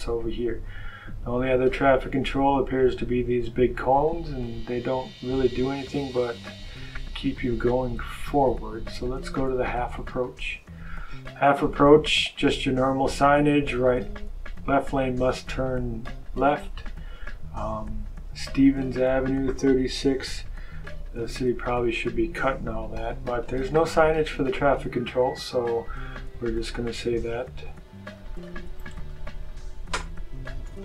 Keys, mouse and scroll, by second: 5.5 click, 10.0 click, 10.9 click, 25.1 click, 26.8 click, 28.0 click, 28.7 click, 29.4 click, 30.2-30.8 typing.